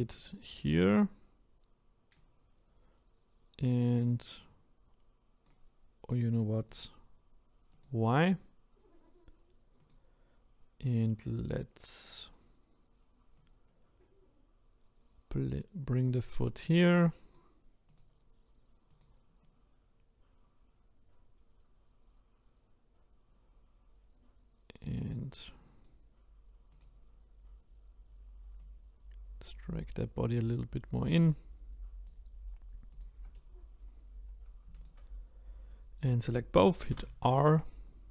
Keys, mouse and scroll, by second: 6.2 click, 7.8-9.9 right drag, 9.9 click, 13.6 click, 18.0 click, 19.0 click, 26.8 click, 28.7 click, 33.0 click, 36.9 r.